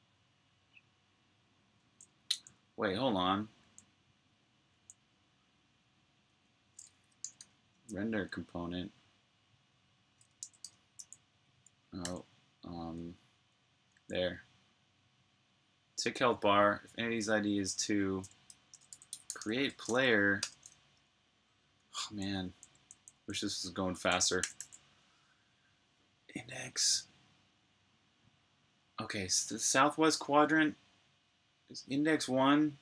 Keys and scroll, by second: 2.2 super+j, 6.9-7.8 typing, 10.1-11.1 typing, 11.9 super+j, 16.2 k, 18.6-20.3 typing, 21.4-24.5 typing, 32.2-32.8 typing.